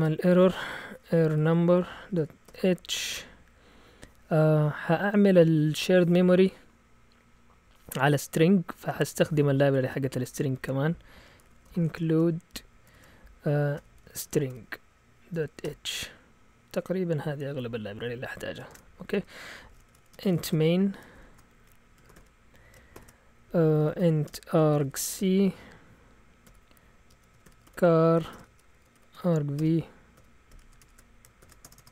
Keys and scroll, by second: 0.0-3.5 typing, 9.8 Return, 10.6-15.6 typing, 18.7 shift+Tab, 19.0 Return, 19.1 Return, 19.6-31.4 typing, 31.6 Return, 31.8 Return.